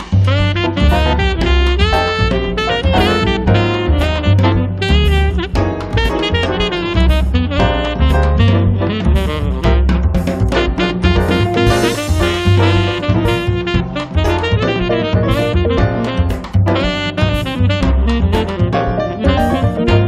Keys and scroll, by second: 3.0-4.2 typing, 8.1 f, 9.7 4, 10.0 Return, 10.7 p, 12.3 space, 17.7 m, 19.1 1, 19.4 0, 19.5 Return, 19.8 space.